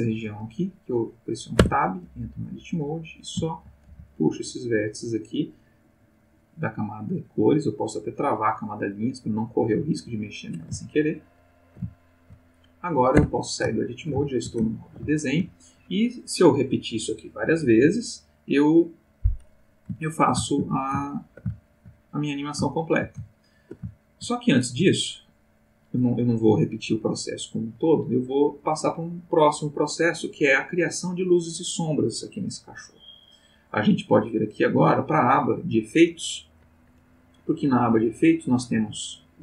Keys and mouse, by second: 1.6 Tab, 2.4 click, 3.5 shift+click, 3.8 shift+g, 4.7 click, 6.2 click, 8.2 click, 9.8 click, 10.8-11.6 ctrl+middle drag, 11.9-12.4 ctrl+shift+middle drag, 13.2 Tab, 13.8 ctrl+middle click, 20.0 ctrl+middle click, 21.0 ctrl+shift+middle click, 21.6 ctrl+shift+middle click, 22.7-23.9 shift+middle drag, 24.1 ctrl+shift+middle click, 35.0 click, 38.0 click.